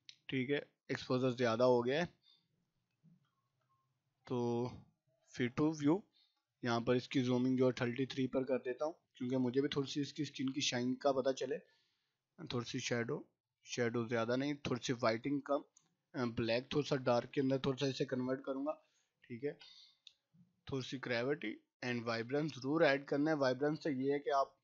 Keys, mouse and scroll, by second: 11.2-18.8 drag, 18.8 space, 19.1 click, 19.3 space, 20.7-23.5 drag, 23.5 right click, 24.2 click.